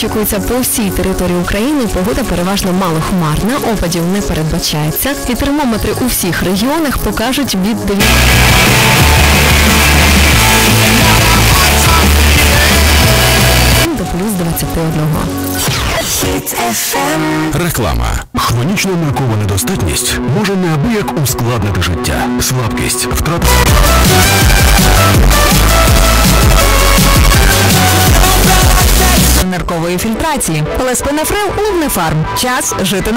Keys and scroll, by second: 14.4 Page_Down, 29.4 Page_Down.